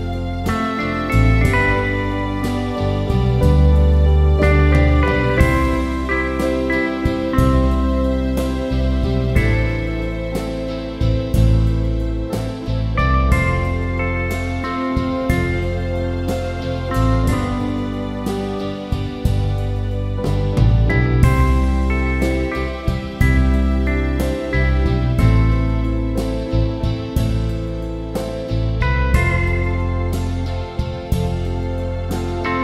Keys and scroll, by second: 4.9 ctrl+-, 5.5 ctrl+-, 9.5 Return, 12.5 ctrl+=, 27.0 ctrl+t, 31.9 Return.